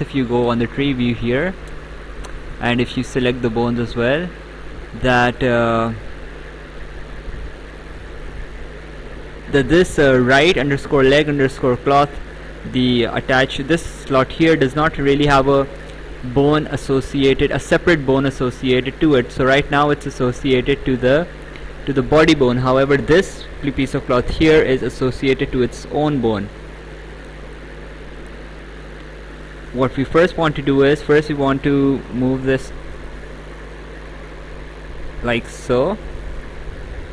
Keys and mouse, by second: 3.3 click, 5.0 click, 7.1 click, 8.9 click, 14.5 click, 23.6 click, 26.7 click, 28.9 click, 29.6 right click, 31.2 click, 32.6 click.